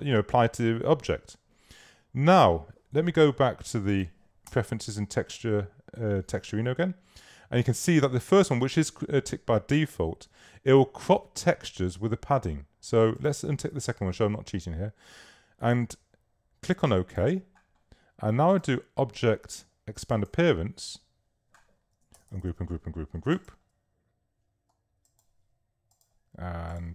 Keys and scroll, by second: 1.1 v, 4.5 Return, 22.2 shift+super+g.